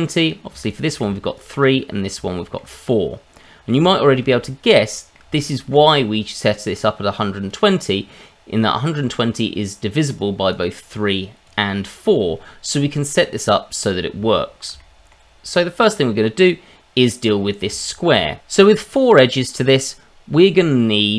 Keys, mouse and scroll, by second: 0.0 click, 1.0 shift+middle click, 1.3 click, 2.3 shift+middle click, 3.4 middle click, 3.9 shift+middle click, 4.9 middle click, 5.4 shift+middle click, 7.2 click, 8.8 click, 10.5 click, 11.4 click, 14.3 shift+middle click, 15.4 click, 17.2-17.8 scroll up 3, 17.8 shift+middle click.